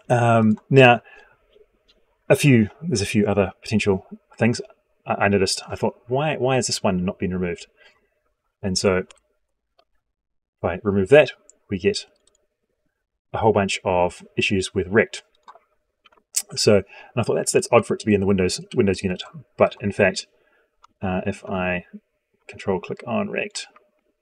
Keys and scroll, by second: 16.2 ctrl+z.